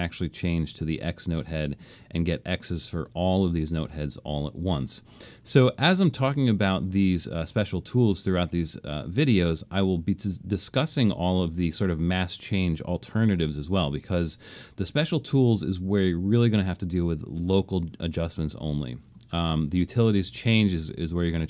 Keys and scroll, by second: 5.5 super+z.